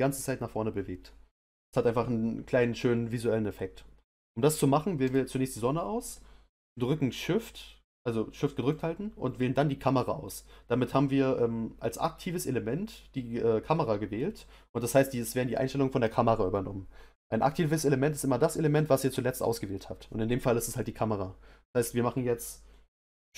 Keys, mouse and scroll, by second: 5.1 click, 8.7 shift+click.